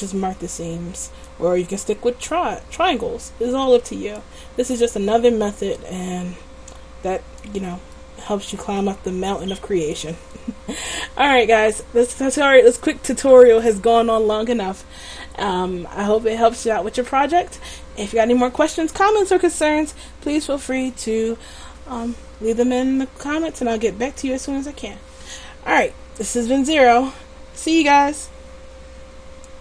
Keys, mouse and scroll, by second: 4.4-5.9 middle drag, 11.5-29.6 middle drag.